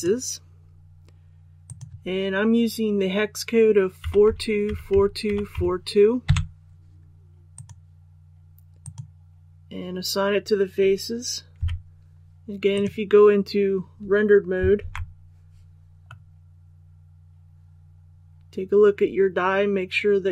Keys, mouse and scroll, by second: 4.0-5.5 typing, 7.5 click, 11.5 z, 12.7 click, 14.8 alt+a, 16.0-20.3 middle drag.